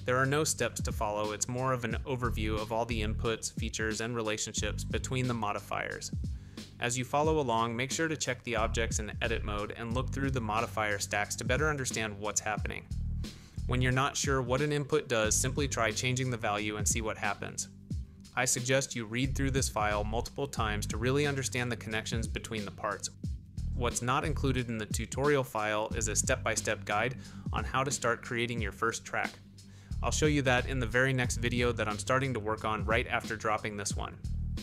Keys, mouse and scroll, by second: 0.0 ctrl+alt+KP_1, 1.7 click, 2.2-3.1 middle drag, 5.4-7.5 drag, 8.5 click, 8.7 shift+middle click, 8.8-10.9 typing, 9.4 Tab, 12.4 Tab, 13.0-14.2 drag, 14.5 click, 14.7-15.8 drag, 16.7 x, 17.6-18.4 shift+middle drag, 20.2 click, 21.0 g, 23.4 click, 24.4 click, 26.5 middle click, 28.4 middle click, 32.2 click, 33.5-34.6 shift+middle drag.